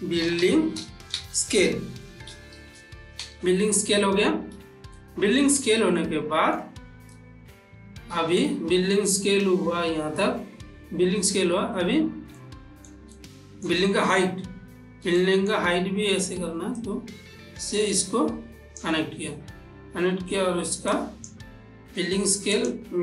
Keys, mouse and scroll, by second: 0.0-3.1 typing, 6.4 shift+middle click, 8.6 shift+middle click, 8.8-11.5 shift+middle drag, 12.7-13.5 ctrl+middle drag, 13.6-14.8 shift+middle drag, 15.7-17.2 shift+middle drag, 17.2-21.2 drag, 21.3-22.9 drag.